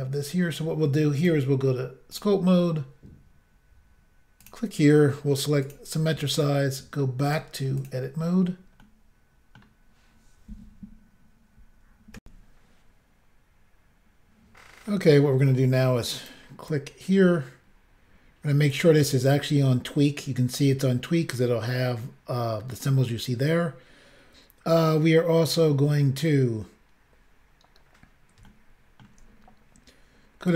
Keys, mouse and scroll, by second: 1.2 click, 1.3 click, 2.2 click, 2.4 click, 4.4 click, 4.5 click, 5.7 click, 5.7 click, 7.3 click, 7.4 click, 7.8 click, 7.9 double click, 8.9 middle click, 12.2 Insert, 14.9 middle click, 16.2 click, 16.3 click, 16.7 click, 28.5 shift+middle click, 29.4 scroll up 2, 30.5 click.